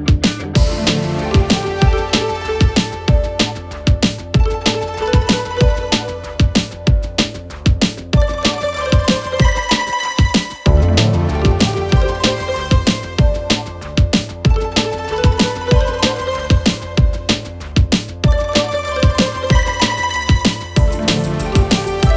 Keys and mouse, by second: 0.0 shift+d, 2.4 click, 4.2 g, 6.5 shift+click, 6.5 shift+right click, 8.9 click, 10.8 shift+click, 11.3 shift+click, 12.7-13.2 shift+middle drag, 14.9 shift+click, 15.5-15.8 shift+middle drag, 16.3 shift+drag, 16.8 shift+drag, 18.7 ctrl+j, 19.5-19.8 shift+drag, 20.5 shift+middle click, 21.5-22.1 drag.